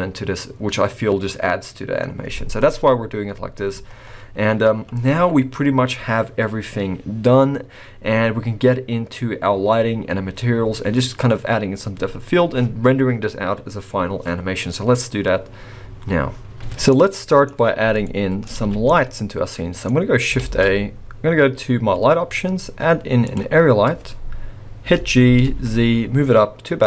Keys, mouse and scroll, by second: 3.9-6.9 scroll down 2, 16.9 middle click, 17.8 scroll down 4, 18.0 middle click, 18.5 alt+scroll up 1, 18.6 alt+a, 18.8 middle click, 20.4 shift+a, 24.8 g.